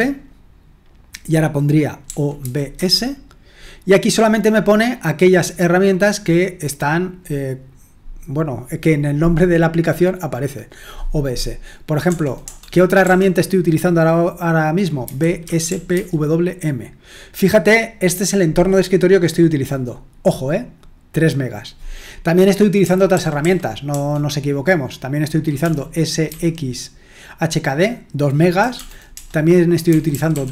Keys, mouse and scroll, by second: 2.1-3.2 typing, 12.0 BackSpace, 12.4 BackSpace, 13.0 BackSpace, 14.8-16.4 typing, 22.8-23.9 typing, 26.0-26.7 typing, 28.7-30.5 typing.